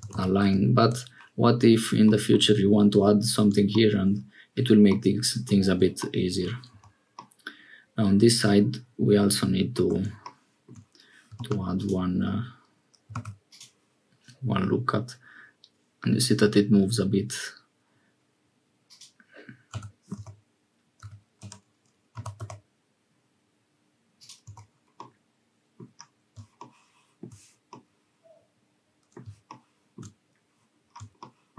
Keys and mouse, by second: 4.9 middle click, 6.7 Tab, 7.2-9.9 middle drag, 11.4 ctrl+r, 13.1 ctrl+r, 19.7 s, 22.2 g, 24.5 Tab, 25.0 middle click, 27.7-30.0 middle drag.